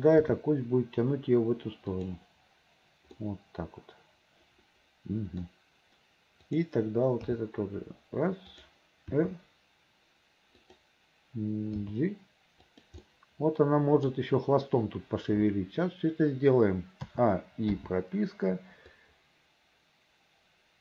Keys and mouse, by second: 0.3 g, 3.4-5.3 drag, 5.5 click, 6.6 middle click, 7.4 g, 9.2 r, 11.9 g, 13.2-14.2 drag, 17.2 a, 17.8 i, 19.0-20.8 drag.